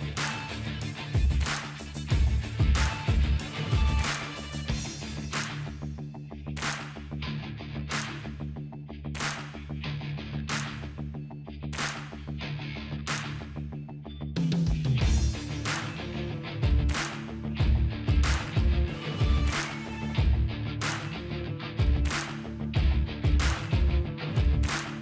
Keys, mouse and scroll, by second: 2.5 click, 11.0-13.9 drag, 14.9-16.0 drag.